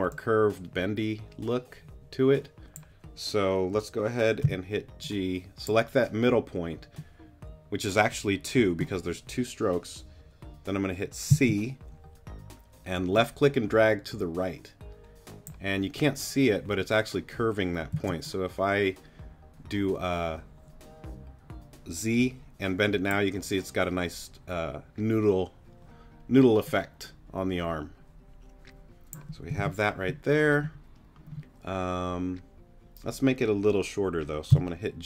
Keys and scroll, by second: 4.4 g, 11.3 c, 17.9 z, 29.6 super+z, 34.5 g.